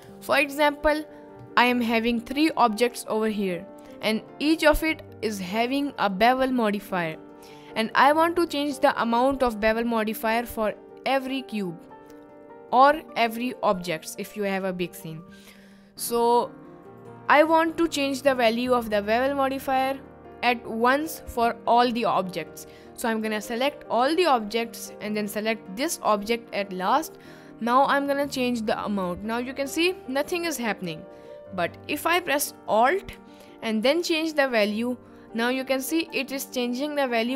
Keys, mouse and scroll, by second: 4.0 click, 4.4 click, 5.7 click, 7.0 click, 14.4 middle click, 15.9 middle click, 23.4-24.3 drag, 25.2 shift+click, 25.9 shift+drag, 28.3 click, 30.3 ctrl+z, 34.1-36.2 alt+drag.